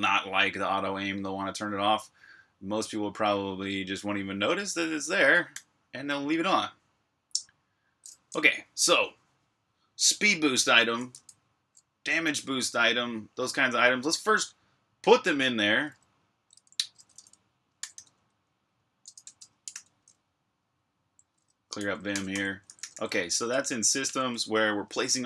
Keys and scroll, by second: 0.1 typing, 2.4-5.4 typing, 7.8 shift+\, 17.0 Escape, 17.4-20.0 typing, 21.7-23.9 typing.